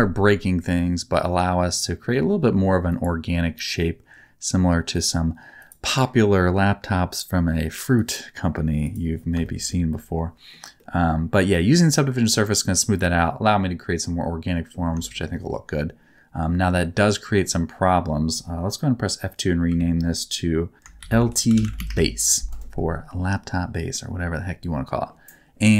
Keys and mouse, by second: 5.5 click, 7.9 click, 9.4 shift+middle click, 9.7 middle click, 10.7 middle click, 12.5-14.7 middle drag, 15.0 shift+middle click, 15.3 middle click, 19.6 F2.